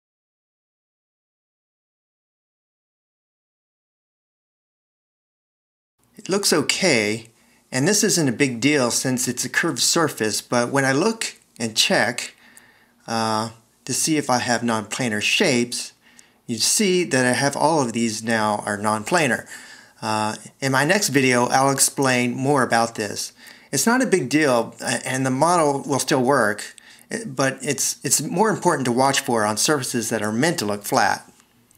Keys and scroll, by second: 10.3 v, 24.5 c.